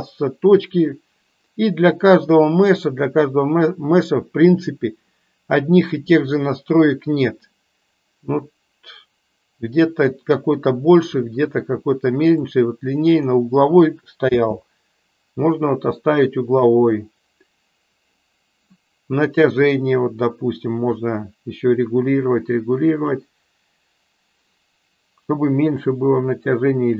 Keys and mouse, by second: 2.6 click, 12.3 click, 14.2 space, 15.7-17.0 middle drag, 21.1-23.6 drag.